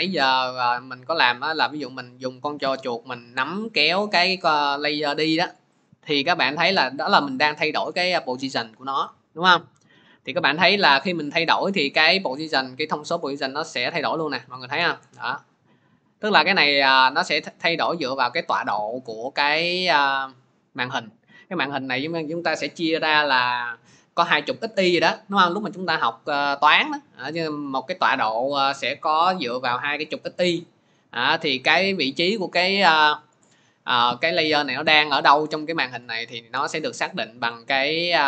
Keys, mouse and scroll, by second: 5.4-21.5 drag, 34.4-38.2 drag.